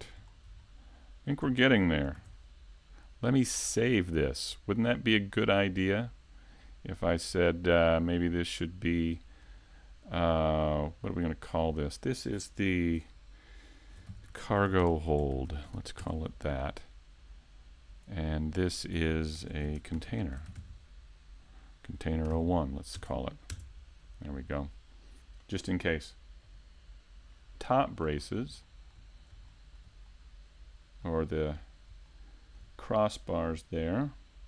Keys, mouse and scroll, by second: 0.9 shift+middle click, 1.4-2.9 scroll up 4, 1.7 shift+middle click, 2.5 shift+middle click, 3.0 middle click, 4.6 shift+middle click, 6.3 middle click, 9.8 right click, 11.2 a, 12.1 shift+a, 14.3 middle click, 15.3 click, 16.5 s, 17.8 click, 18.2 middle click, 18.9 KP_7, 19.1 KP_5, 21.1 s, 21.8 right click, 22.3 click, 25.1 scroll down 1, 25.4 middle click, 26.4 KP_3, 28.0-28.9 scroll up 4, 28.4 shift+middle click, 32.0 click, 32.6 click.